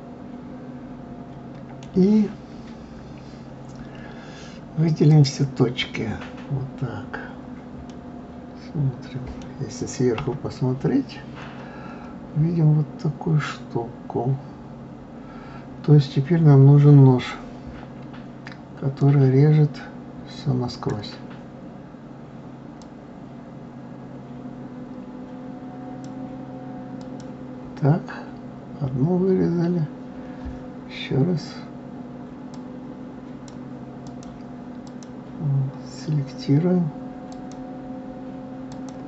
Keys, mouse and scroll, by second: 5.1 click, 7.9-10.2 middle drag, 10.2 KP_7, 19.0-22.0 drag, 22.8 click, 27.0 click, 32.5 click, 34.1 click, 34.8 click, 37.3-39.0 drag.